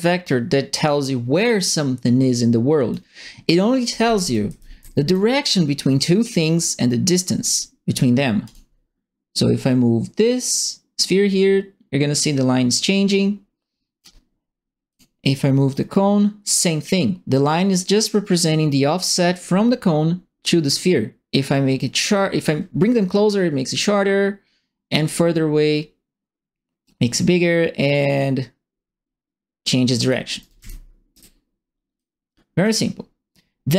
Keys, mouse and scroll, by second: 4.2-5.0 typing, 4.3 right click, 8.4 click, 9.3-14.0 drag, 14.9 click, 15.7-30.1 drag, 30.2-31.0 typing, 30.4 right click, 31.9 click.